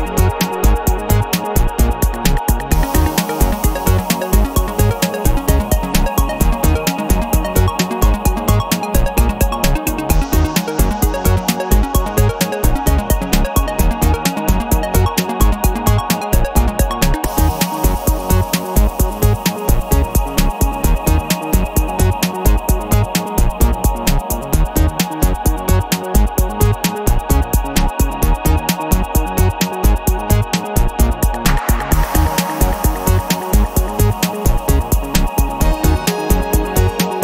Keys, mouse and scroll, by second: 0.8 click, 1.5 click, 2.4-5.3 middle drag, 5.4 0, 6.2 scroll down 2, 6.7 scroll up 2, 7.4 click, 8.6 click, 10.2 click, 10.9 click, 11.6 space, 12.4 middle click, 13.6 click, 15.1-17.4 drag, 17.5-18.6 middle drag, 18.6 click, 19.2-22.1 middle drag, 22.7-24.1 drag, 24.7-28.6 drag, 29.4 click, 30.0 space, 30.9 click, 31.3 space, 31.8 click, 33.2 click, 34.6 click, 35.3 click, 36.3-37.2 middle drag.